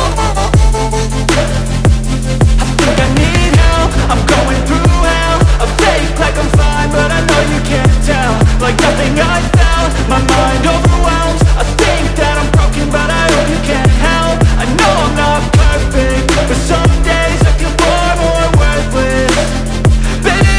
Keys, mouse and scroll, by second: 1.5 double click, 8.9 double click, 9.6-10.7 typing, 10.7 Return, 20.1-20.5 typing.